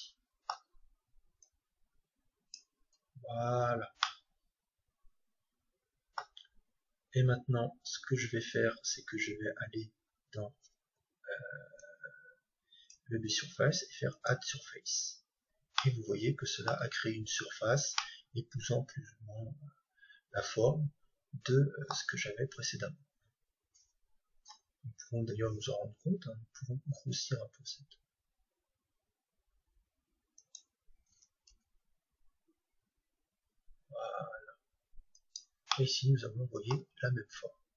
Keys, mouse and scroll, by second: 3.7-5.9 middle drag, 11.7-13.7 drag, 14.1-16.0 drag, 15.7-19.9 middle drag, 22.5-24.5 right drag, 24.5 Tab, 26.8 s, 30.5-32.5 drag, 31.5 g, 35.3-37.6 drag, 35.9-37.6 middle drag.